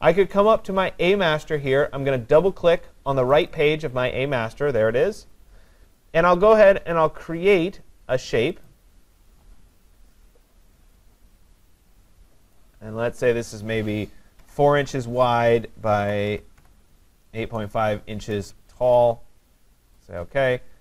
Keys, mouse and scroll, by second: 3.4 click, 3.7 click, 8.7 click, 12.6 click, 14.6 typing, 14.8 Tab, 16.0-17.1 typing, 18.3 Tab, 20.0 click.